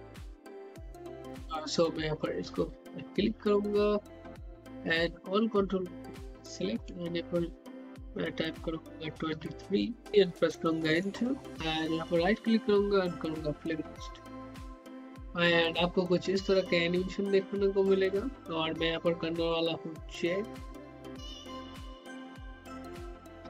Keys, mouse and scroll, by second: 2.2 click, 5.5 click, 8.2 click, 12.0 right click, 13.3-23.4 drag.